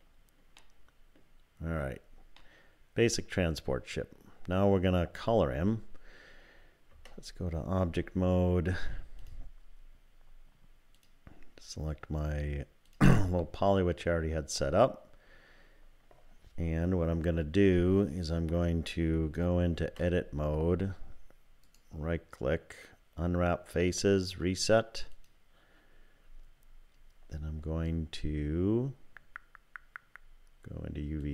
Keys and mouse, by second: 0.6 middle click, 2.5-4.6 middle drag, 6.9 Tab, 10.9-13.0 drag, 19.8 Tab, 21.7-25.3 drag.